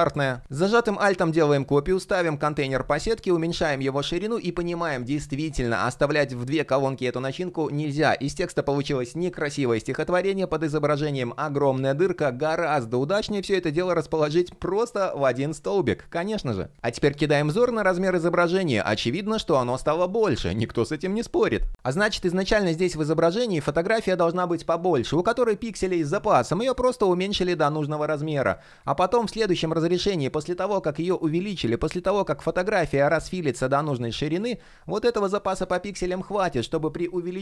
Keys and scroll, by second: 17.2 shift+p, 20.3 super+z, 21.6 shift+p.